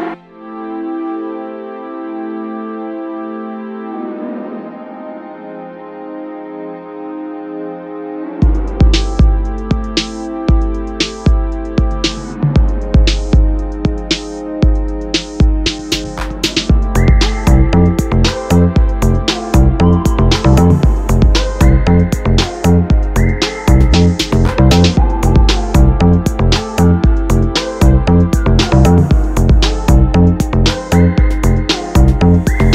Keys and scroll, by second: 8.7 ], 17.7 ctrl+z, 18.9 ctrl+alt+z.